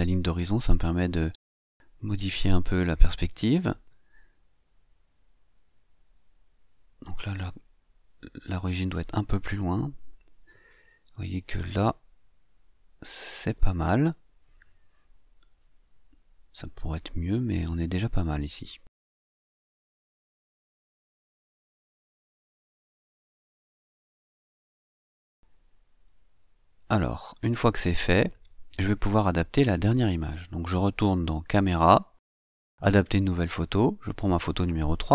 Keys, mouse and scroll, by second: 0.7-3.3 drag, 4.1-6.6 drag, 7.5-15.4 drag, 21.1 scroll up 1, 24.0 click, 30.9 click, 33.1 click, 34.3 click.